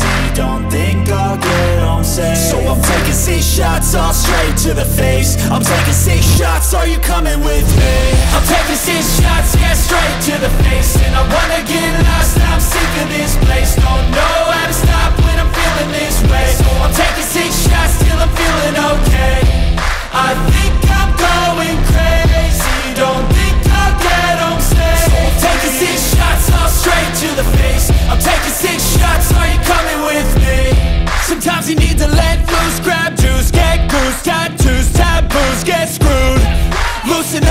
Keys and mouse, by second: 2.1-5.9 drag, 9.8 g, 14.1 click, 15.2 g, 18.9 g, 30.1 click, 31.7 shift+click, 33.9-37.5 drag.